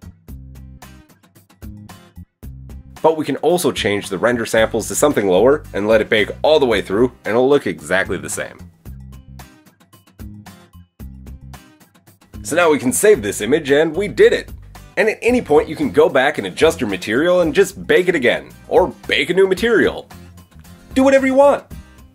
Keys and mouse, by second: 8.6-9.8 middle drag, 9.8-14.9 drag, 15.2-22.1 drag.